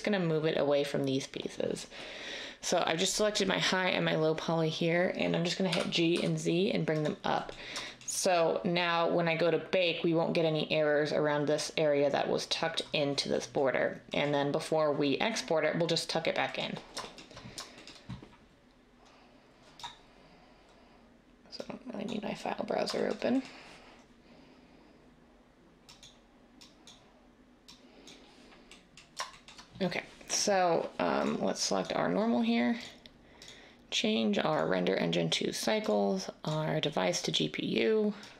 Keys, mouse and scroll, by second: 5.7-6.1 typing.